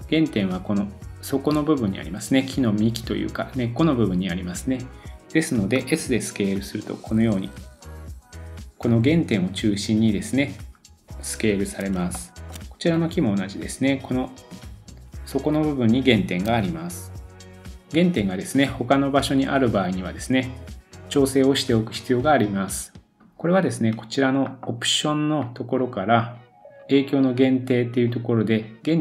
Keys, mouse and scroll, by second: 0.7-1.5 scroll up 1, 4.4-5.8 scroll down 2, 5.8 s, 12.9 click, 15.1-25.4 middle drag, 16.4 s, 25.4-29.0 drag.